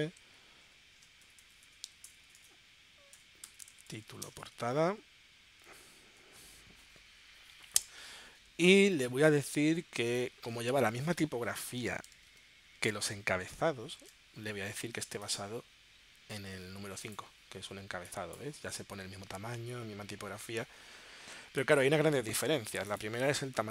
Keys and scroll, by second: 1.0-6.6 typing, 12.7 super+Tab, 14.2 super+Tab.